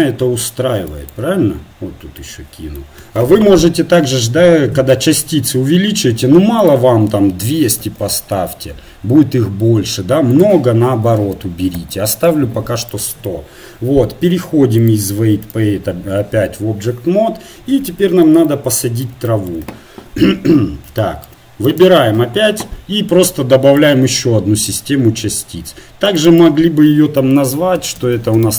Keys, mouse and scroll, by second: 8.2 KP_0, 11.8 KP_0, 12.1-14.3 drag, 15.4-21.7 drag, 21.7-24.7 right drag, 24.7-28.5 drag.